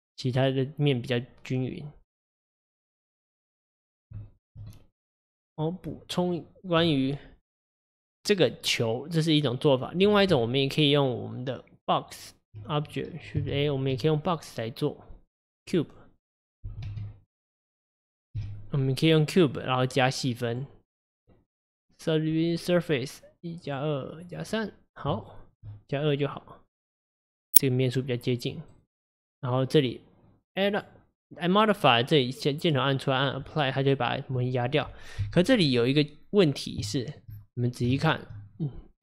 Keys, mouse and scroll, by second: 2.6 click, 3.2-4.3 scroll down 4, 4.3-6.3 shift+middle drag, 6.3 click, 10.1 click, 10.4 Tab, 13.6 shift+a, 16.7 g, 20.6 click, 21.2-25.3 drag, 25.3-27.2 shift+middle drag, 27.2-28.8 drag, 28.8-30.7 right drag, 30.7-34.5 drag, 34.5 middle click, 35.3 KP_1, 36.9-37.4 shift+middle drag, 37.4-38.1 scroll up 3, 38.1-39.0 shift+middle drag.